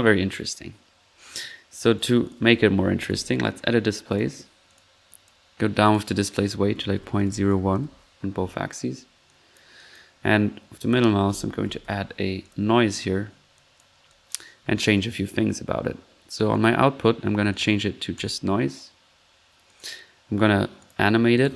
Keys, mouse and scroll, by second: 1.1 middle click, 1.8-2.5 drag, 2.1 right click, 2.8-3.6 typing, 4.1 click, 4.7 click, 5.1 click, 5.8-6.1 drag, 9.2 click, 10.1 middle click, 10.7 middle click, 11.0-12.3 typing, 12.4 click, 13.5 click, 13.9 click, 16.5 click, 17.5 click, 18.1 click, 19.6 click, 20.8-21.1 drag, 21.3 drag.